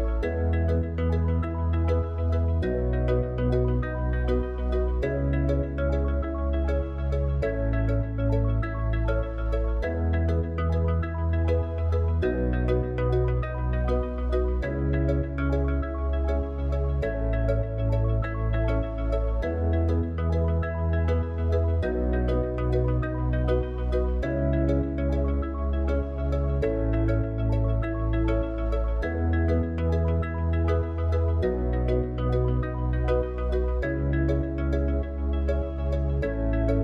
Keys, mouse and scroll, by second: 4.5 click, 17.6 click, 19.7 click, 21.0 click, 24.6-26.2 drag, 34.1-36.8 drag.